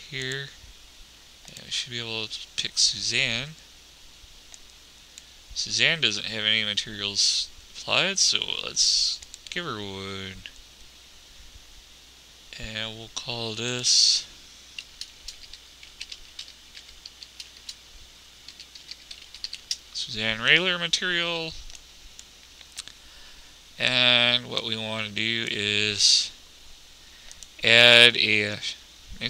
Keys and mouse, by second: 1.5-20.2 drag, 26.7 click.